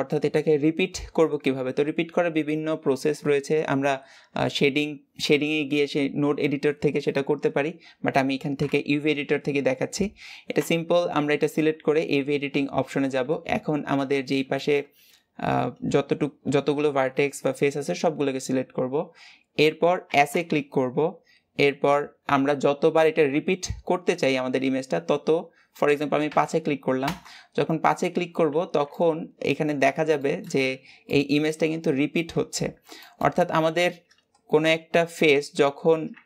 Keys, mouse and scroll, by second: 8.5 KP_7, 10.5 Tab, 13.1 a, 28.1-28.5 scroll up 2, 28.5 alt+z, 28.7-29.8 middle drag, 29.8 scroll up 1, 30.1 shift+middle click, 30.5-30.9 scroll up 2, 30.9 middle click, 31.7-35.2 scroll down 1, 35.2 g.